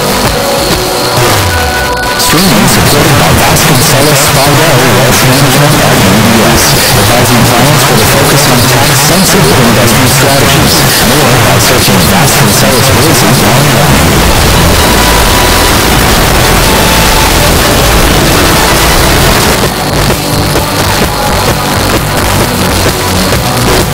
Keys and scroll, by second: 19.3 Page_Down.